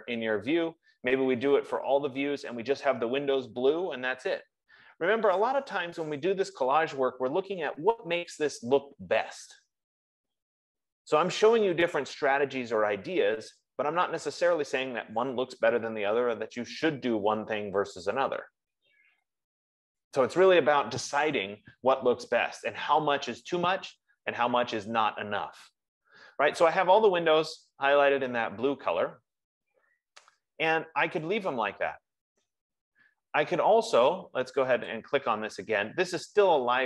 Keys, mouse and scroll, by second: 24.6 F15, 35.2 click.